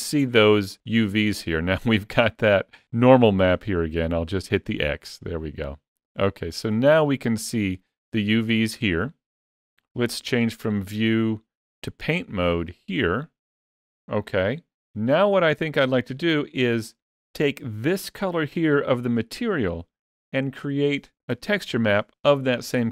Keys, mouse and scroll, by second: 1.3-1.9 scroll down 3, 1.9 scroll down 5, 2.4 scroll down 1, 4.4 click, 5.0-6.8 scroll up 12, 6.8-7.4 scroll down 1, 7.4-9.3 scroll down 1, 10.4 click.